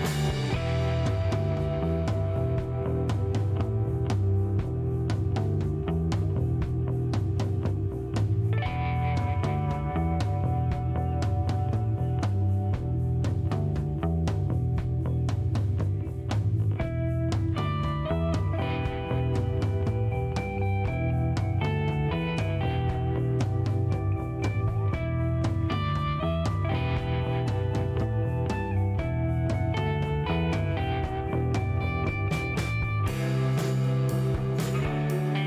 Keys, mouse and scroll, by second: 6.9 click, 9.9 click, 11.3 click, 15.3 click, 17.2 click, 17.9 click, 19.1 shift+right click, 19.8 shift+middle click, 20.5 shift+right click, 27.6 click, 28.7 scroll down 2, 29.1 middle click, 29.5 scroll up 2, 30.8 shift+middle click, 31.8 shift+middle click, 32.6 click.